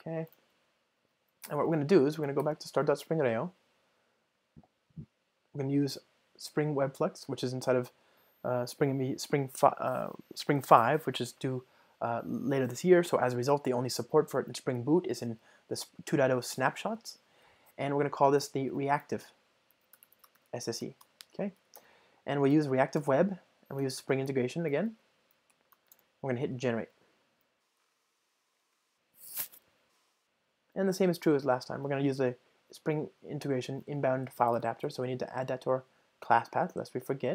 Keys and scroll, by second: 33.8 ctrl+shift+super+o.